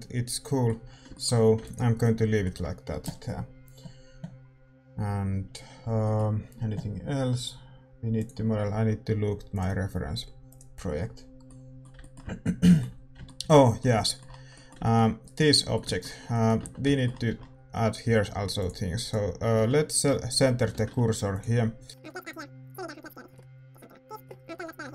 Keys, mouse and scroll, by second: 2.0 ctrl+s, 5.8 scroll down 1, 14.5-18.5 middle drag, 15.2-16.9 right drag, 16.6 Tab, 17.2 a, 18.5-21.3 drag, 19.0-21.3 right drag, 21.3-24.2 typing, 23.6 click, 24.4 right click, 24.5 ctrl+b.